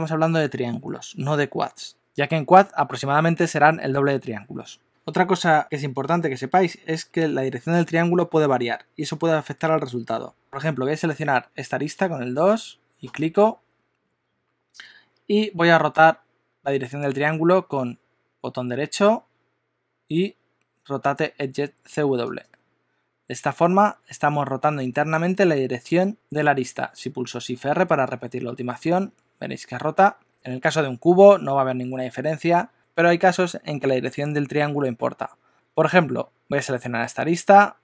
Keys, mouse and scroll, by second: 11.1 2, 13.0 click, 19.0 right click, 28.2 shift+r, 29.1 shift+r, 35.5 super+z, 35.5 x, 37.2 click.